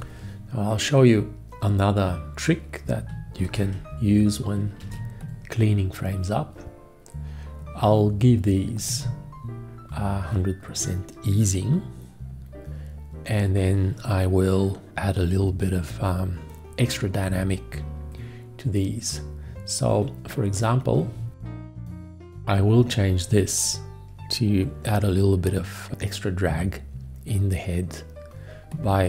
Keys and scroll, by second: 3.4 shift+x, 4.8 shift+x.